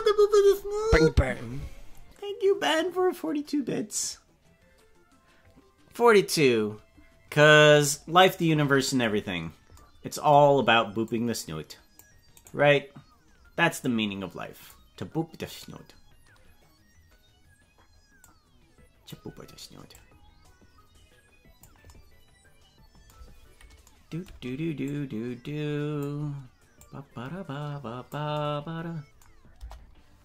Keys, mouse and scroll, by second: 11.1 click, 12.5 right click, 13.8 click, 15.6 right click, 18.2 click, 19.9-21.7 drag, 24.9-26.0 drag, 26.8-28.1 drag, 29.6 KP_0.